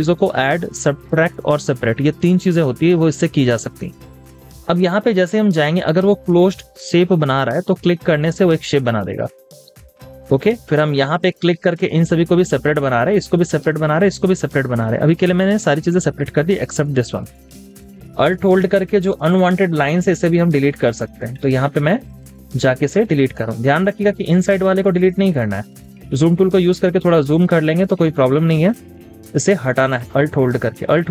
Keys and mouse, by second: 12.1 double click, 18.3 alt+click, 23.9 alt+click, 27.3 space, 29.8 alt+click.